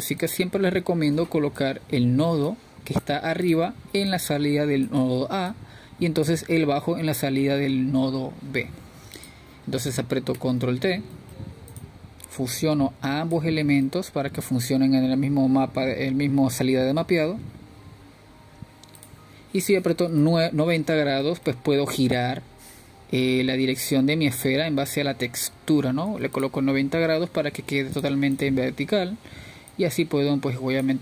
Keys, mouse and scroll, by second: 3.5 click, 5.8-6.3 drag, 6.7 click, 7.3 click, 8.8 drag, 12.3 scroll down 4, 12.5 click, 15.0 click, 15.7 drag, 18.2-21.9 middle drag, 23.6 click, 24.5-25.6 middle drag, 25.6-28.5 drag, 29.4 ctrl+z, 29.7-31.0 drag.